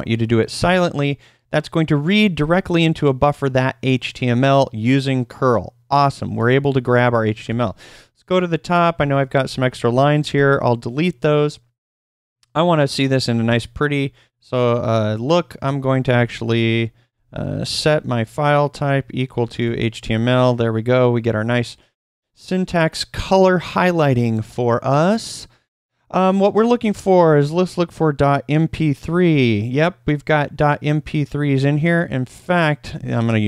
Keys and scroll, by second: 7.4 typing, 8.7-10.3 typing, 15.9-20.1 typing, 26.8-29.2 typing.